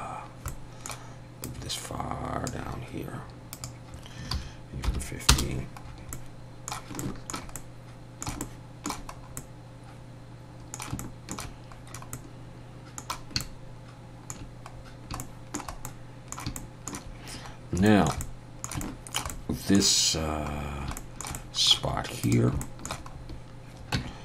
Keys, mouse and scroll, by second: 0.5 middle click, 1.4 click, 3.5 click, 5.8 scroll down 2, 6.1 middle click, 7.0 middle click, 7.5 middle click, 8.4 shift+middle click, 8.5 shift+middle click, 9.1 scroll up 1, 9.4 middle click, 11.0 shift+middle click, 12.1 middle click, 13.4 shift+middle click, 14.8 scroll down 1, 15.2 shift+middle click, 15.8 middle click, 16.6 shift+middle click, 17.9 shift+middle click, 18.2 middle click, 18.8 shift+middle click, 19.3 shift+middle click, 21.0 middle click, 21.3 middle click, 22.2 click, 22.6 shift+middle click, 23.1-23.9 scroll up 1, 23.9 Tab, 23.9-24.2 scroll up 1.